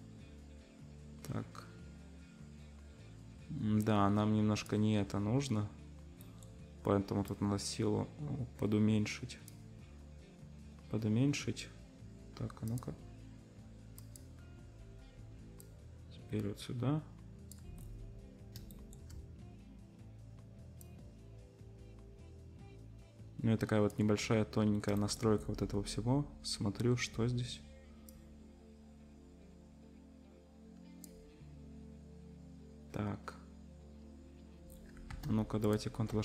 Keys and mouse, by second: 12.8 click, 14.0 middle click, 14.1-15.6 drag, 15.6-35.8 middle drag.